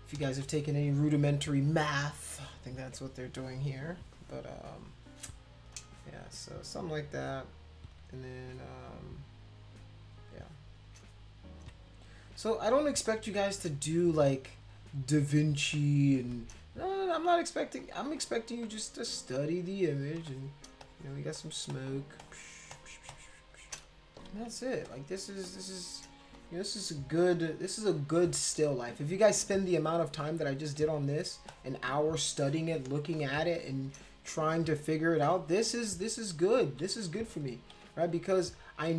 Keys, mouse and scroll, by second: 0.3 ctrl+z, 1.8 ctrl+z, 5.8 space, 5.8-10.3 drag, 10.4 click, 11.6 x, 12.8 space, 13.0 click, 14.3 click, 15.2 click, 15.6 space, 15.7 click, 16.7 click, 17.3 click, 17.8 click, 18.1 click, 18.6 click, 19.2 click, 19.5 click, 20.2 space, 20.3 click, 20.8 click, 21.3 click, 21.7 click, 22.2 click, 22.6 space, 22.7 click, 23.1 click, 24.7 space, 24.8 click, 25.4 click, 26.3 space, 26.3 click, 27.2-28.9 drag, 30.6 space, 30.8 click, 31.5 click, 32.3 click, 33.1 click, 37.7 x.